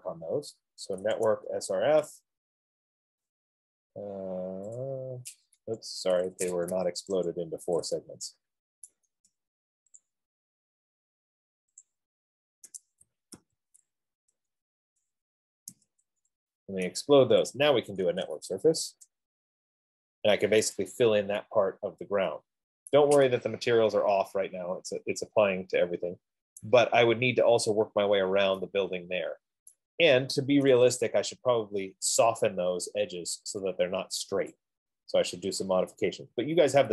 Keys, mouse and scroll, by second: 0.8 Return, 5.0 right click, 5.0 typing, 5.1 click, 5.8 Escape, 6.8 Escape, 6.8 Escape, 7.8 click, 9.3 right click, 10.3 shift+click, 12.3 shift+click, 14.5 BackSpace, 14.7 BackSpace, 14.8 BackSpace, 16.9 Return, 19.0 typing, 19.1 Return, 20.9-21.6 typing, 21.1 click, 22.4 F15, 22.7 typing, 23.2 right click, 26.9 right click, 30.0 right click, 32.7 right click, 33.3-33.7 scroll, 34.8 right click, 36.4 scroll.